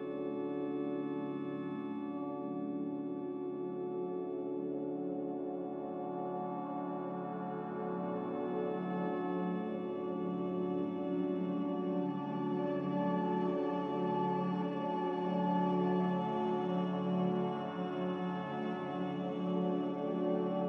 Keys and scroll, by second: 2.1 2, 3.2 n, 5.7 Escape, 5.8 Escape, 5.9 Escape, 6.4 Escape, 9.5 Delete, 11.0 b, 13.0 Delete, 14.0 n, 19.5 f.